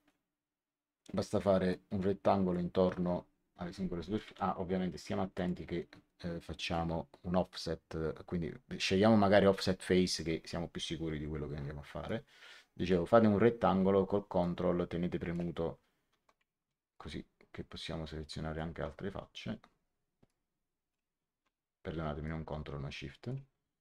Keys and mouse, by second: 1.6 click, 5.3 click, 6.5 click, 10.0 click, 12.0 click, 14.3 ctrl+click, 16.8 ctrl+click, 20.2 shift+click, 22.2 shift+click.